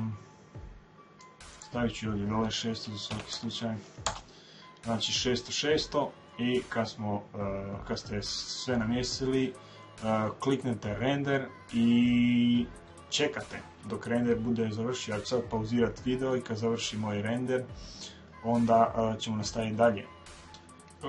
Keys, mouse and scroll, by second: 1.2-3.1 drag, 3.2 KP_0, 5.7-8.9 middle drag.